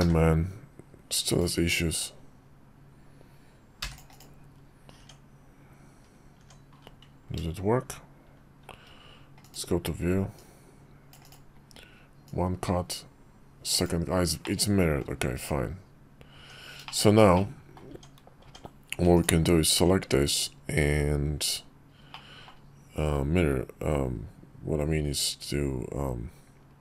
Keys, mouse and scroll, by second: 1.7-4.1 drag, 4.7 Tab, 7.2 Tab, 8.3 shift+v, 10.1-11.4 drag, 12.0-14.2 drag, 14.2 middle click, 15.1 Tab, 16.5 Tab, 16.6 shift+middle drag, 17.1 middle click, 18.8 Tab, 21.8 middle click.